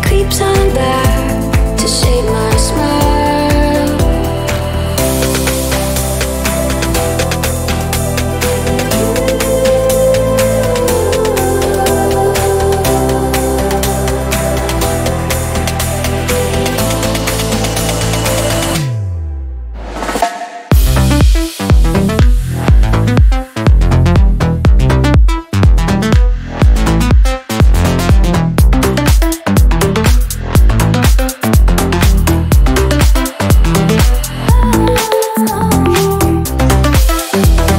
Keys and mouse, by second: 1.9-5.2 middle drag, 5.2 shift+d, 6.0-7.1 middle drag, 7.1 click, 7.5 click, 8.2-9.7 middle drag, 9.7-12.8 drag, 14.4-16.4 drag, 16.4-19.4 middle drag, 19.7-22.7 drag, 23.7-25.6 drag, 25.6-29.0 middle drag, 29.3-32.1 middle drag, 32.1 click, 33.0-36.9 ctrl+middle drag.